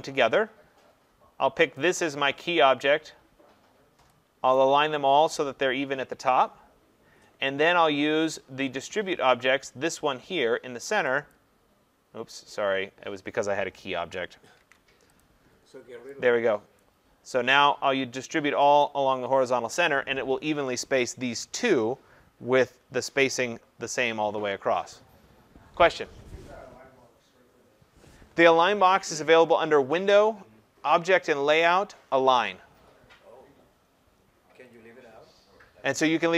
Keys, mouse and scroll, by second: 1.9 click, 11.3 click, 14.6 ctrl+z, 15.2 click, 16.8 click, 29.9 click, 34.8 click.